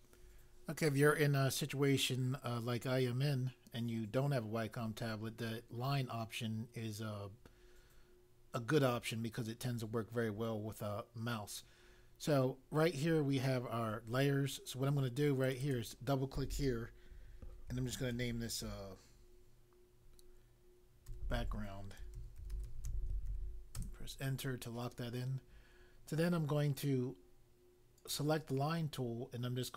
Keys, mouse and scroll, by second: 15.4 click, 15.6 click, 17.4-18.5 typing, 21.1-23.7 typing, 23.8 Return, 28.0 click.